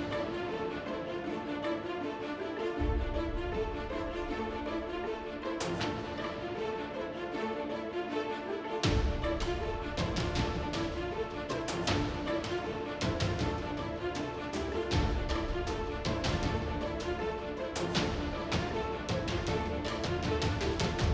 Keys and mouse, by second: 0.1 shift+a, 1.3 t, 1.6 t, 1.8 Tab, 2.1 s, 3.5 s, 3.7 KP_1, 4.1 e, 5.3 ctrl+z, 6.1 click, 6.6-9.9 typing, 10.3 ctrl+r, 11.3 ctrl+r, 12.1-14.9 typing, 15.5-16.4 drag, 15.7 ctrl+b, 16.5 Tab, 16.9 KP_7, 17.0 z, 17.6 z, 17.9 Tab, 18.1 ctrl+b, 18.9 Tab, 19.5-20.1 middle drag.